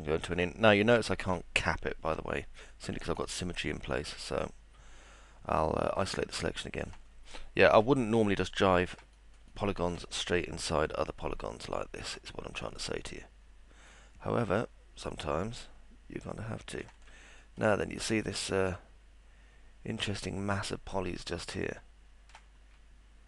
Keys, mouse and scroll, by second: 0.0 alt+middle click, 1.4 alt+middle click, 2.7 alt+middle click, 8.7 alt+middle click, 9.1 middle click, 9.5 alt+middle click, 10.3-12.1 alt+middle drag, 12.6 scroll up 2, 14.6-16.8 alt+middle drag, 17.4 middle click, 17.8-22.3 alt+middle drag.